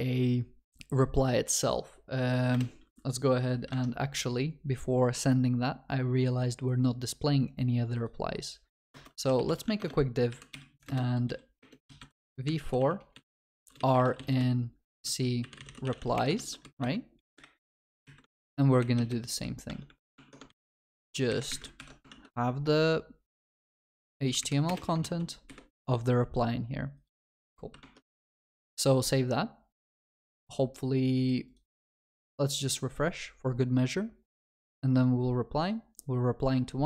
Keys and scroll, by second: 9.7 Tab, 16.4 ctrl+s, 18.3 ctrl+c, 19.7 Tab, 20.8 ctrl+v, 20.8 ctrl+s, 21.8 ctrl+y, 25.5 Escape, 27.2 Escape, 27.3 ctrl+s.